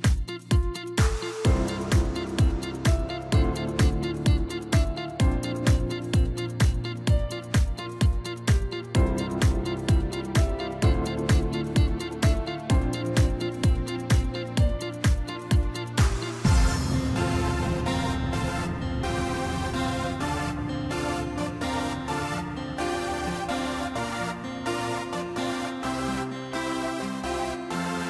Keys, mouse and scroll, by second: 0.3-3.3 drag, 4.1-8.9 drag, 9.0-12.1 drag, 15.3-15.7 scroll down 2, 15.7-18.6 middle drag, 18.6 Tab, 19.0-20.8 middle drag, 20.8-21.4 scroll up 6, 21.4-24.1 middle drag, 24.1-25.4 scroll down 4, 25.4 scroll down 1, 25.7 drag, 27.0-28.0 scroll down 7.